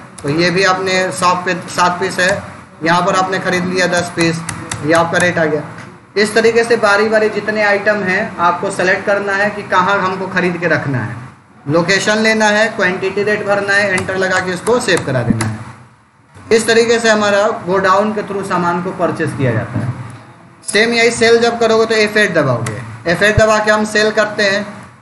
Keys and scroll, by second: 0.0 space, 0.4 Down, 2.1 Return, 3.4 1, 4.0 Return, 21.9 F8, 22.5 Return, 23.3 Right, 24.4 Down.